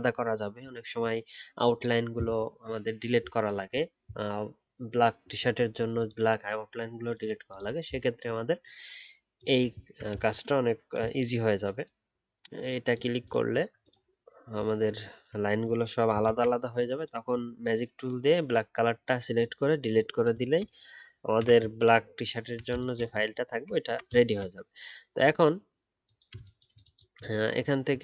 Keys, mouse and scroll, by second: 9.8-12.8 alt+scroll down 1, 13.5-15.1 alt+scroll down 2, 15.1-16.2 alt+scroll up 1, 16.2 ctrl+z, 22.4-22.7 alt+scroll down 1, 23.8 alt+scroll up 1.